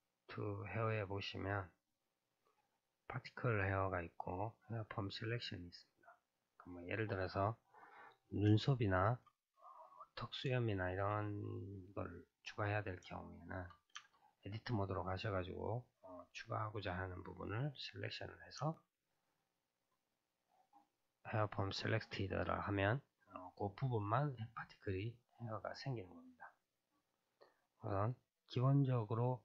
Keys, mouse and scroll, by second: 0.0-2.8 drag, 6.6-8.7 scroll up 2, 8.7-9.3 shift+middle drag, 9.3-9.9 scroll up 2, 9.9-10.6 scroll up 3, 10.6-14.1 shift+middle drag, 14.1 Tab, 18.8 Tab.